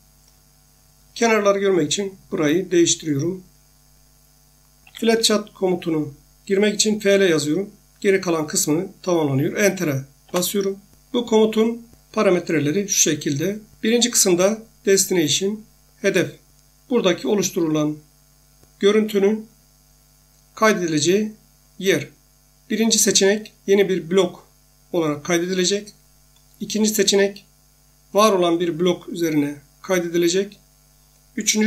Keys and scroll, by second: 4.6-5.6 typing, 10.2 Return.